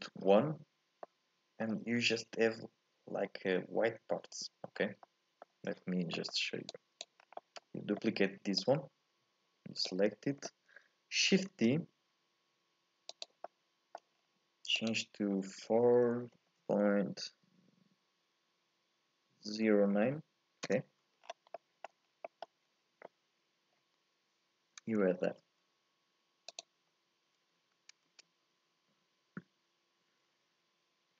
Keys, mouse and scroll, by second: 1.0-4.0 middle drag, 4.7 scroll down 1, 5.0-6.1 middle drag, 6.1-6.7 scroll up 1, 6.7 click, 7.2 scroll down 1, 7.4-8.6 middle drag, 8.6-11.5 drag, 11.5 shift+d, 13.4 middle click, 14.1-14.7 scroll up 1, 14.7-17.8 drag, 21.2-21.5 scroll down 3, 21.5 middle click, 22.0 scroll up 2, 22.2-25.1 middle drag, 25.1 shift+a, 28.1 shift+a.